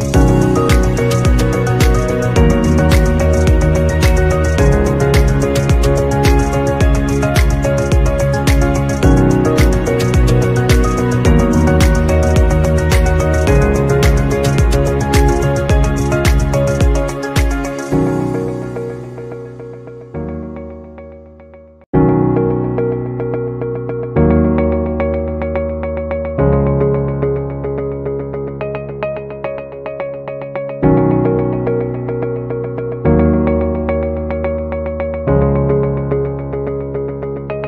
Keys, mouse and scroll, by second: 4.0 ctrl+alt+scroll down 1, 4.6 ctrl+alt+scroll up 1, 6.3-7.2 alt+scroll up 1, 10.5 shift+click, 22.8 double click, 24.0 Delete, 28.2 shift+click, 30.7 alt+scroll down 1, 33.4 alt+scroll up 1, 33.9 alt+scroll down 1, 35.8 shift+click.